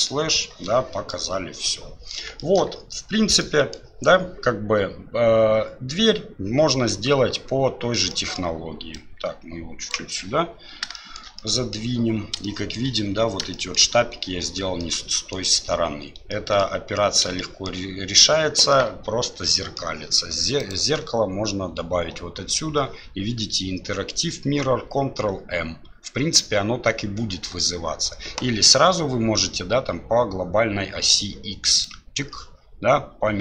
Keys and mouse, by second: 1.1-2.1 middle drag, 2.4 shift+middle drag, 3.4-3.7 middle drag, 8.1 middle click, 9.8-10.8 drag, 11.1 shift+middle click, 11.5 middle drag, 12.5 shift+middle drag, 13.6 shift+middle click, 14.8-15.3 middle drag, 16.4 middle drag, 17.4-17.7 shift+middle drag, 18.8-19.8 middle drag, 20.7-31.9 drag.